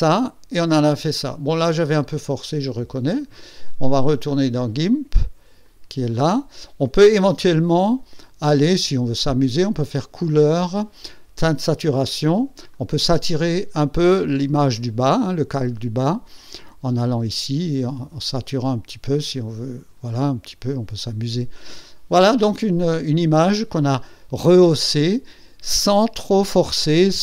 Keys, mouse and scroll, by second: 0.2 scroll down 1, 1.5 scroll up 1, 1.9 scroll down 2, 2.9 scroll up 1, 4.2 click, 5.6 click, 7.8 click, 9.9 click, 11.5 click, 12.6 click, 17.2-20.0 drag, 20.7 click.